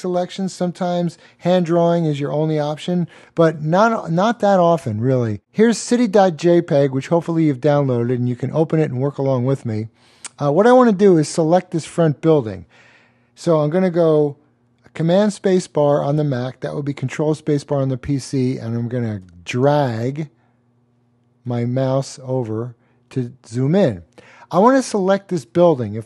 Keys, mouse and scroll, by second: 5.4 click, 15.1-16.2 super+space, 16.4 super+space, 16.5-16.8 super+space, 17.0 super+space, 17.2 super+space, 19.2 click.